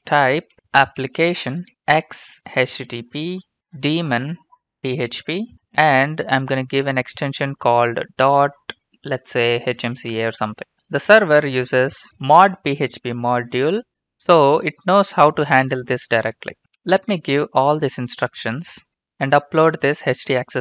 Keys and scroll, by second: 0.0-5.7 typing, 9.5-10.7 typing.